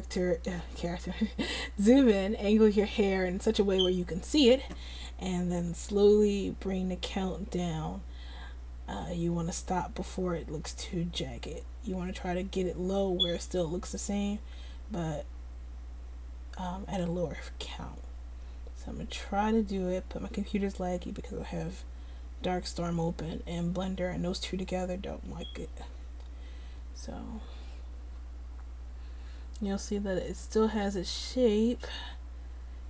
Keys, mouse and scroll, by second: 6.0-15.4 drag, 15.4-32.8 middle drag.